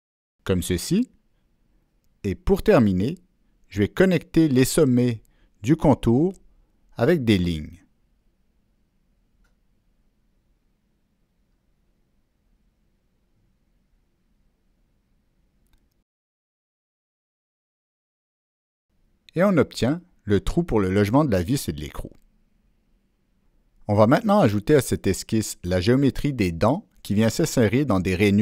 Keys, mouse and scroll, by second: 1.5-1.9 right drag, 3.8 right click, 3.9 click, 4.8 click, 5.9 click, 7.1 click, 8.4 click, 9.3 click, 10.0 click, 11.0 click, 11.8 click, 12.8 click, 13.3 click, 14.3 click, 15.4 click, 16.3 click, 16.9 click, 17.9 click, 18.8 click, 19.6 click, 21.7-22.1 scroll down 1, 22.4-22.7 ctrl+scroll up 1, 23.7-24.3 drag, 24.7 Escape, 25.5 ctrl+middle click, 27.8-28.2 right drag.